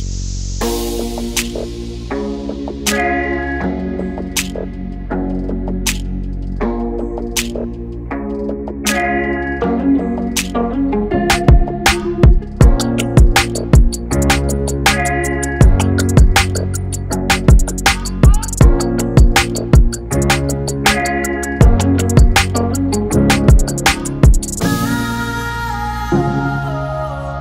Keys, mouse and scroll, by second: 0.0-0.3 scroll down 2, 0.3 KP_1, 0.8 shift+z, 1.0 click, 2.4-2.8 scroll up 2, 3.0 ctrl+r, 8.9 middle click, 10.5 ctrl+r, 12.8 Tab, 13.6 shift+z, 16.7 middle click, 18.5 click, 18.7 click, 19.4 Tab, 20.8 ctrl+r, 26.2 a, 26.4 right click.